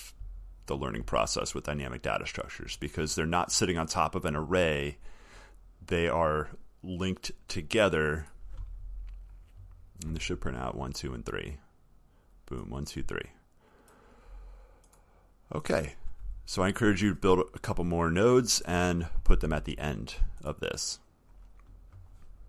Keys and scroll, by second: 0.6 alt+scroll, 1.8 alt+scroll, 4.4 alt+scroll, 5.4 alt+scroll down 1, 5.4 alt+scroll.